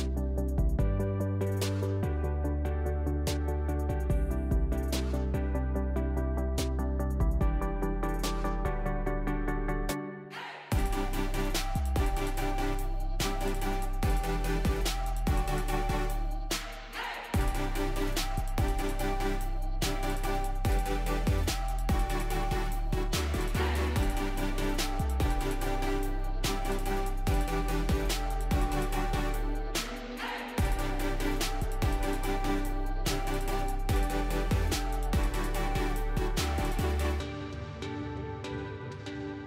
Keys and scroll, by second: 1.9 w, 3.2 w, 5.4 q, 8.9 s, 10.5 q.